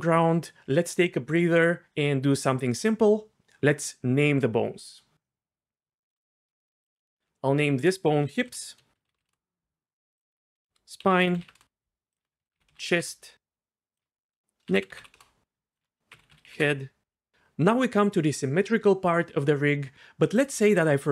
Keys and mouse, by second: 7.8 F2, 10.3 F2, 12.2 F2, 14.0 F2, 15.7 click, 15.8 F2.